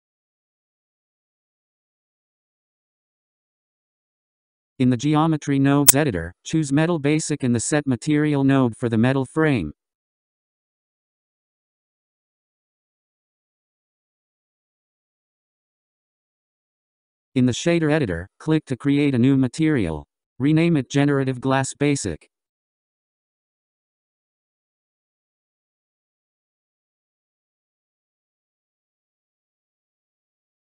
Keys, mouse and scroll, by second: 0.1 middle click, 0.4-1.0 middle drag, 1.0 click, 6.1-6.4 scroll, 7.8-9.8 drag, 9.8-11.5 scroll, 12.0-13.2 middle drag, 13.2-15.0 scroll, 18.8-20.9 middle drag, 20.9-24.8 drag.